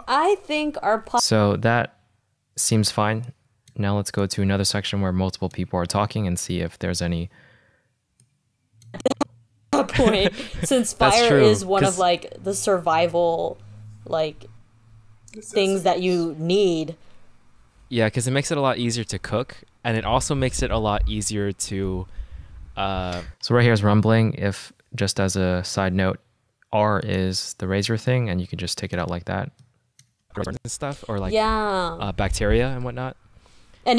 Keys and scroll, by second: 1.2 space, 6.3 =, 7.2 =, 9.7 space, 12.1 -, 19.6 -, 23.3 space, 23.9 -, 28.2 v, 30.6 space.